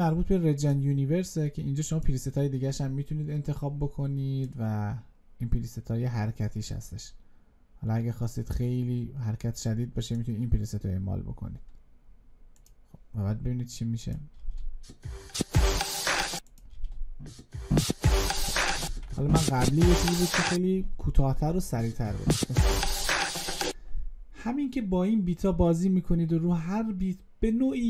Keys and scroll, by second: 18.7 ctrl+z.